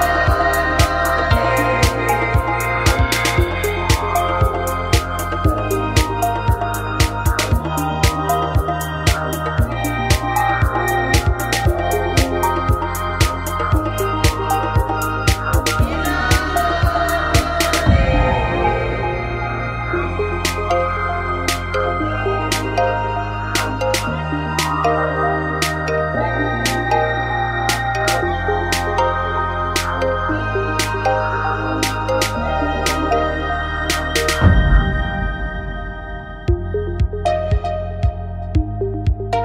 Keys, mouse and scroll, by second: 3.5 Tab, 4.2 alt+m, 6.0 click, 8.3 click, 9.4 super+click, 9.9 n, 10.1 t, 10.4 shift+space, 10.8 middle click, 10.9 middle click, 12.0-15.4 drag, 15.4 middle click, 15.7 middle click, 15.8-19.2 drag, 22.4-24.4 drag, 24.7-27.5 drag, 27.5 right click, 28.1 f, 28.2 a, 29.3 click, 29.7 right click, 32.2 g, 34.1-35.9 drag, 34.6 g.